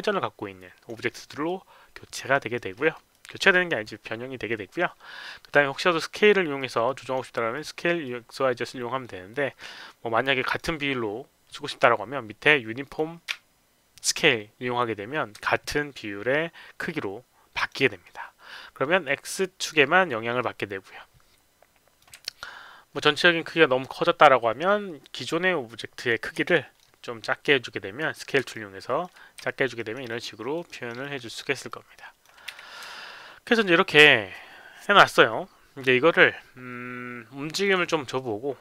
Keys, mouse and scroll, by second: 1.4 alt+click, 2.3 alt+right click, 2.7 alt+middle click, 3.1 alt+click, 6.5 click, 7.5 click, 8.0-10.5 drag, 12.8 click, 15.4-17.6 alt+drag, 19.7-21.9 drag, 22.2 alt+click, 25.0-26.0 drag, 26.4 r, 26.7-28.2 middle drag, 28.5 alt+click, 29.3 alt+r, 29.4 alt+click, 29.7 alt+right click, 30.0 alt+click, 30.6 alt+right click, 30.9 alt+click, 31.3 alt+right click, 31.6 alt+click, 32.5 q, 32.9 alt+click, 37.6 click.